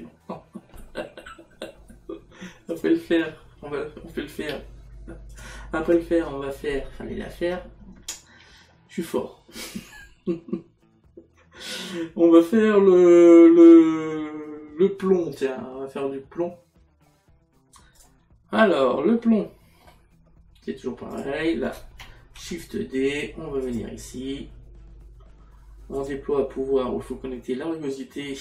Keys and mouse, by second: 2.8 click, 18.0 click, 19.2 middle click, 21.6 click, 23.7 click, 26.0 click.